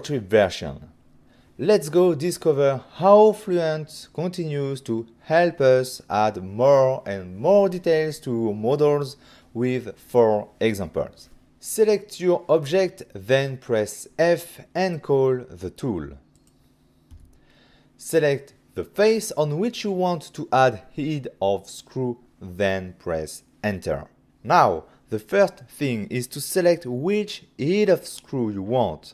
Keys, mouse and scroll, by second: 11.4 click, 11.4 ctrl+scroll up 1, 12.1 click, 12.7 f, 15.8 click, 17.3 click, 17.5 click, 18.3 click, 18.5 click, 18.9 click, 19.1 click, 20.6 click, 20.7 click, 23.3 Return, 25.0 click.